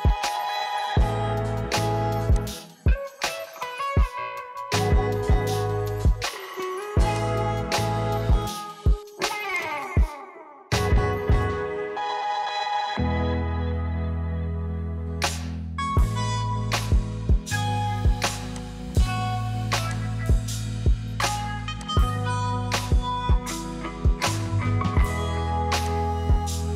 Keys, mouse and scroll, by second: 3.4-5.2 middle drag, 5.2 click, 9.8-12.9 drag, 22.0-26.7 drag.